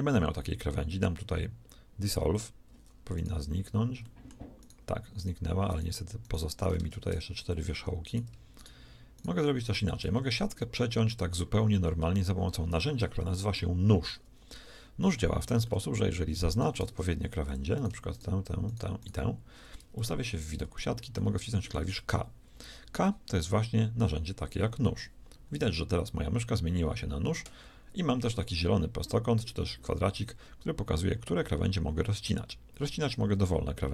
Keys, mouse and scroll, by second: 0.0 x, 6.7 ctrl+Tab, 10.0 x, 13.3 KP_1, 16.7 ctrl+Tab, 19.9 KP_1, 24.5 k.